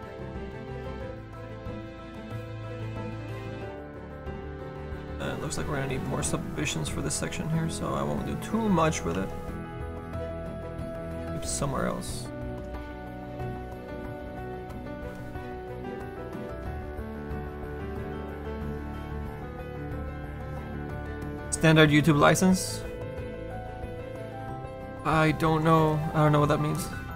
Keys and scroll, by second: 16.1 F9.